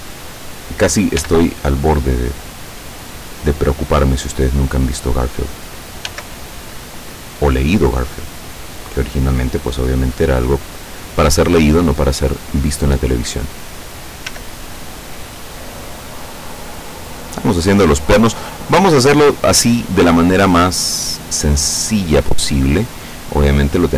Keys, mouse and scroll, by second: 1.3 g, 4.9 click, 6.2 s, 9.6 click, 10.0-10.6 scroll up 2, 10.8-11.2 scroll up 2, 11.8-14.0 drag, 14.4 s, 17.5 click, 18.4 click, 20.0-21.5 drag, 21.7 middle click, 22.2 scroll up 1, 22.8-23.3 scroll down 2, 23.5 middle click.